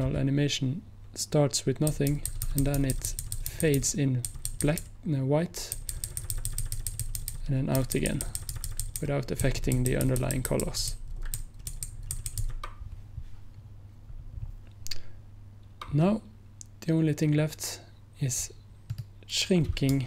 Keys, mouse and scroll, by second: 2.0 Right, 2.2 Right, 2.4 Right, 2.5 Right, 14.2 scroll down 1, 19.0 click, 19.5 click.